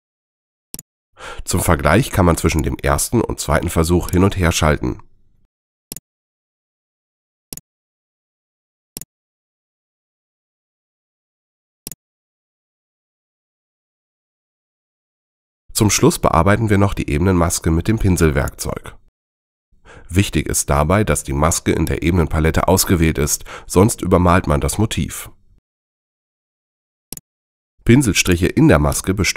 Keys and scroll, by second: 25.5 super+z.